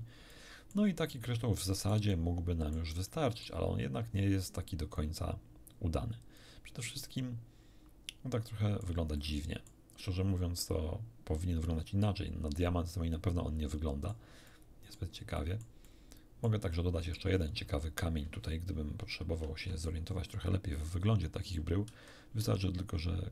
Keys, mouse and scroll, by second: 0.3 middle click, 1.2-2.9 middle drag, 3.1 middle click, 5.0-6.6 drag, 6.9-9.0 middle drag, 9.2 middle click, 12.0-14.3 middle drag, 14.5 middle click, 15.4-16.6 middle drag, 17.1 middle click, 17.5 scroll down 1, 19.3 shift+F5, 20.2-21.0 shift+scroll up 2, 21.9 shift+a.